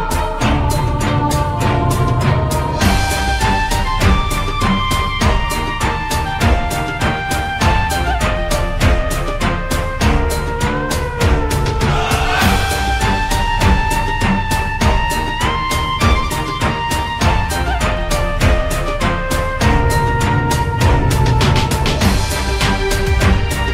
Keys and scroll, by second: 0.4-1.4 typing, 12.8 c.